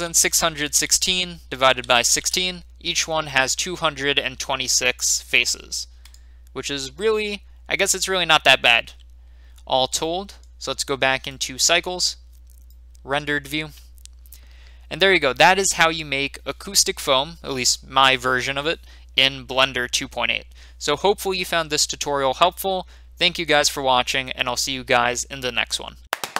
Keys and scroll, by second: 0.0-2.1 typing, 2.2 Return.